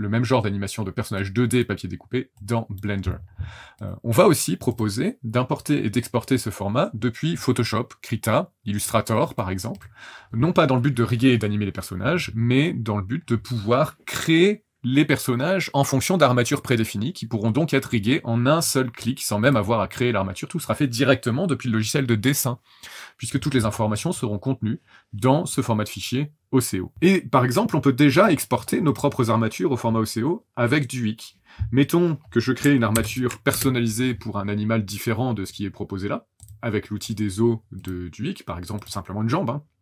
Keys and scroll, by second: 32.9 ctrl+n, 33.5 Return.